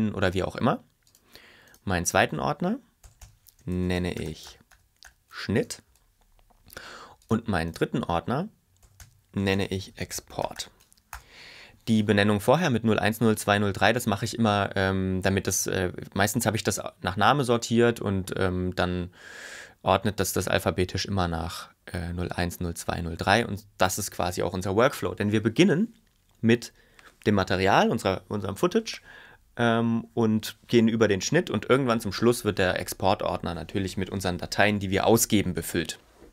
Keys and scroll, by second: 3.2-5.4 typing, 6.0 Return, 9.0-11.2 typing, 11.3 Return.